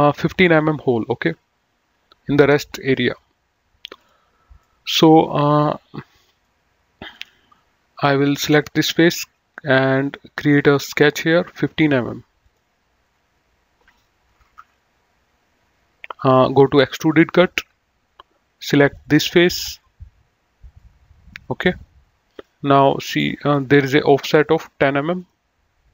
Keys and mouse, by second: 4.0 click, 4.5 middle click, 7.1 click, 8.3 click, 10.3 click, 12.2 click, 14.3 KP_1, 14.4 Return, 17.0 click, 18.8 click, 20.8 middle click, 22.3 click, 24.3 click.